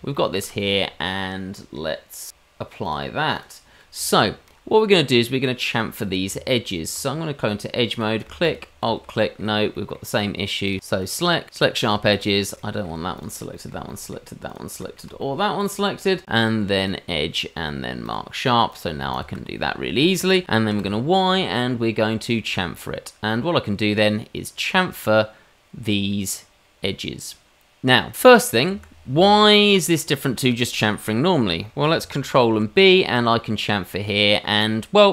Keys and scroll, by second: 6.2 Tab, 20.7 y, 32.3 ctrl+b.